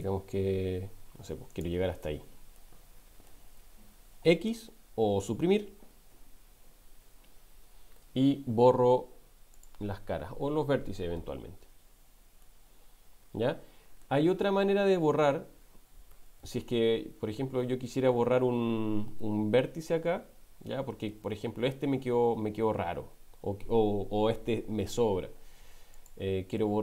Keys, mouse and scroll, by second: 2.5 middle click, 6.5 Delete, 12.5-14.1 middle drag, 14.9 ctrl+z, 15.6 ctrl+z, 16.1 ctrl+z, 16.4 ctrl+z, 16.7 ctrl+z, 16.9 ctrl+z, 17.1 ctrl+z, 17.4 ctrl+z, 17.6 ctrl+z, 17.8 ctrl+z, 18.0 ctrl+z, 18.3 ctrl+z, 18.5 ctrl+z, 21.0 middle click, 25.9 click, 26.6 middle click.